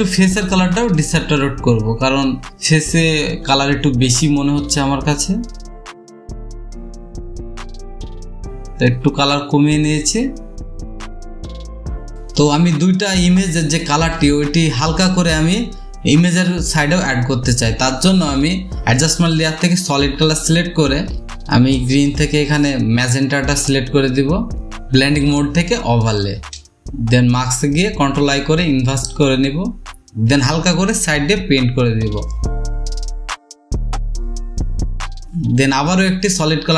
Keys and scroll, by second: 1.9 ctrl+u, 3.5 space, 11.0 space, 27.9 ctrl+i, 30.2-30.7 typing, 33.3 ctrl+z.